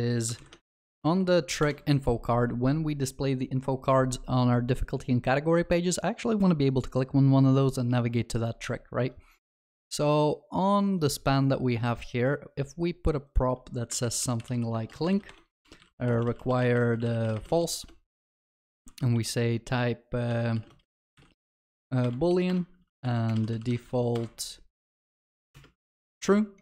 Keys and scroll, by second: 0.4 ctrl+shift+n, 22.1 Return.